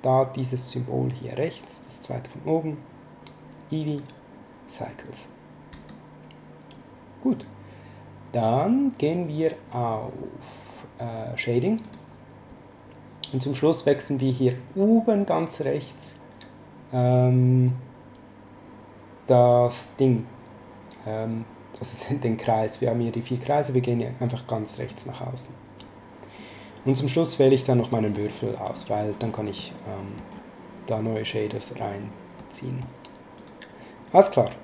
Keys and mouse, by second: 3.8 click, 5.7 click, 11.8 click, 24.7 click, 27.8 right click, 29.6 middle click, 32.3 middle click, 33.3 click.